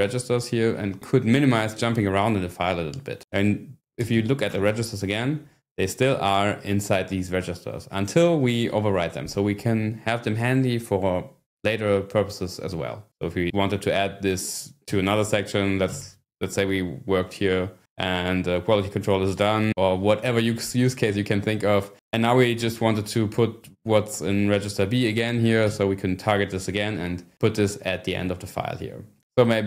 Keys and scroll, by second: 3.3-4.6 typing, 14.9 Escape, 16.0 shift+g, 22.6 shift+', 23.6 b, 25.6 p.